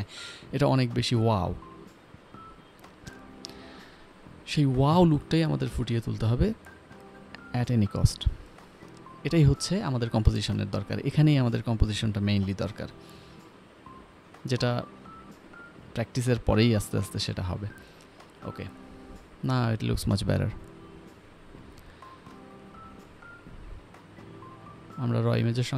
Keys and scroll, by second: 0.1 v, 0.6 v, 7.9 ctrl+t, 19.3 m, 21.5 ctrl+s, 22.3 p.